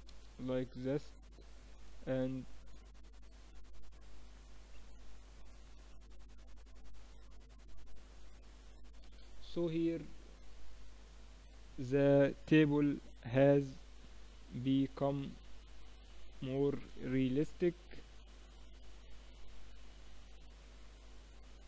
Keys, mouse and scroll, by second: 1.5-3.5 middle drag, 5.4-9.2 drag, 9.2 KP_0, 12.7 click, 13.2 click, 18.0-19.0 drag.